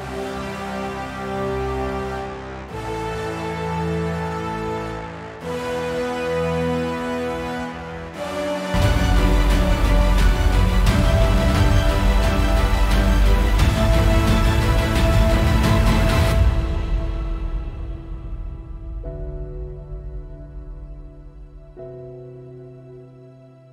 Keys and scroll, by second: 12.0 super+=, 15.0 super+=, 19.6 super+=, 22.7 F8.